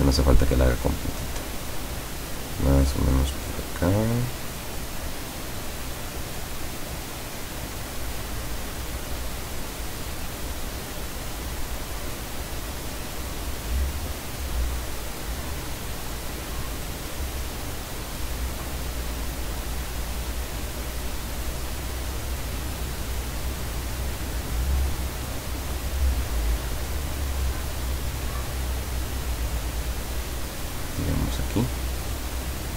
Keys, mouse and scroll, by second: 7.6 click, 12.4 click, 18.4 click, 20.5 click, 30.9 click.